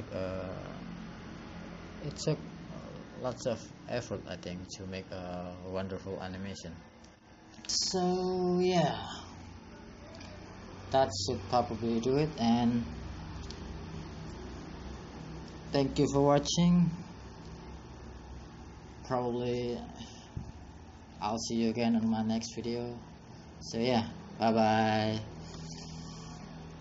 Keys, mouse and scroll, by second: 0.4 scroll down 6, 3.3 click.